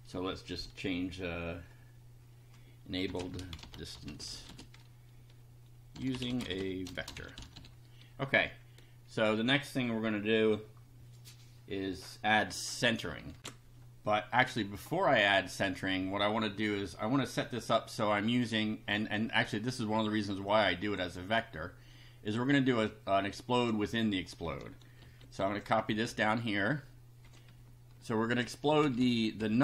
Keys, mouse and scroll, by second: 2.8-8.1 typing, 13.4 ctrl+r, 20.5 click, 21.3 click, 22.5-23.8 drag, 25.0 ctrl+c, 25.5 ctrl+click, 25.9 ctrl+v, 27.6 Down, 28.8 Up.